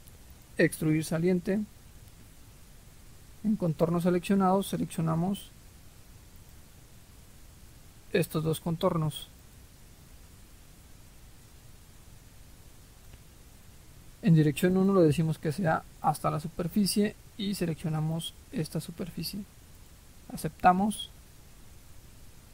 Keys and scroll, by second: 5.4 Delete, 7.0 Delete.